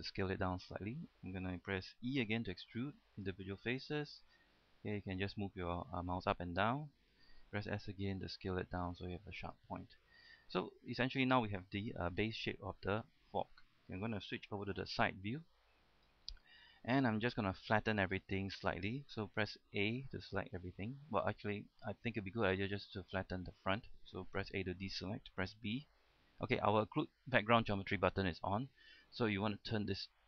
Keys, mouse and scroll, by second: 0.8 click, 2.5 e, 3.3 click, 8.0 s, 9.6 click, 9.9-10.5 scroll down 1, 10.5-11.7 middle drag, 15.0 KP_3, 15.7-16.2 scroll down 1, 16.3 shift+middle click, 16.9 shift+middle click, 17.6 scroll up 1, 17.7 shift+middle click, 18.2 scroll down 1, 18.4 shift+middle click, 19.6 shift+a, 21.5-21.8 scroll up 1, 22.0 shift+middle click, 24.7-25.7 typing, 28.9 right click.